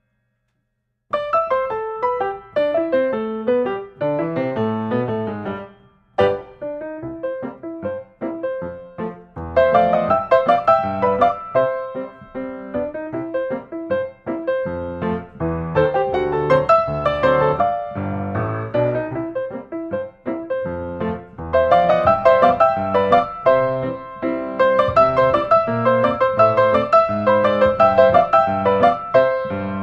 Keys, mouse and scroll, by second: 0.5-1.4 typing, 1.7 Return, 2.6 scroll, 2.6 scroll, 2.7 scroll, 9.3 click, 10.1 click, 10.7-11.8 typing, 12.1 Return, 14.2 click, 15.8-16.3 scroll, 16.8-17.3 scroll, 19.4 click, 22.1-23.4 typing, 23.8 click, 26.1 click.